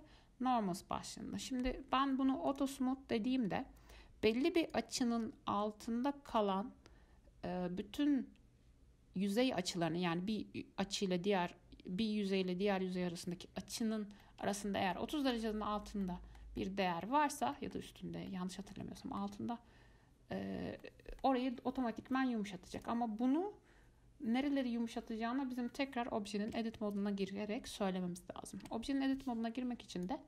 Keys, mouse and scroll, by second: 2.7 click, 4.8-7.8 drag, 16.2-18.2 middle drag, 18.2 scroll up 1, 18.5-19.2 middle drag, 19.2-20.3 scroll up 1, 20.3-20.9 scroll up 1, 20.9 scroll up 1, 21.0-22.6 middle drag, 22.6-23.0 scroll down 2, 23.0 click, 26.7 Tab, 28.8 Tab, 30.1-30.2 drag.